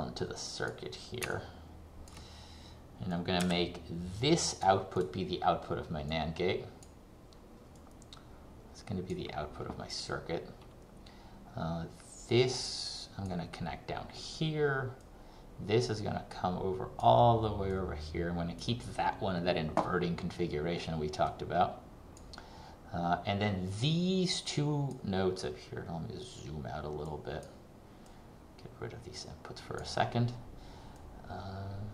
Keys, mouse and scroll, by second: 1.5 ctrl+click, 3.3 click, 25.5 scroll down 1, 27.1 click.